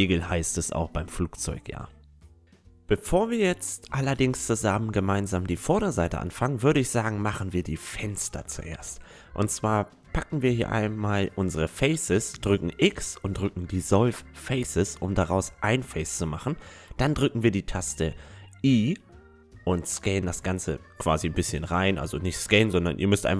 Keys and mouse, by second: 3.6-4.7 middle drag, 6.1-7.8 right drag, 8.4 Tab, 10.9-13.0 right drag, 11.5 x, 13.6-17.3 middle drag, 15.1 i, 19.3-23.3 middle drag, 20.5 i.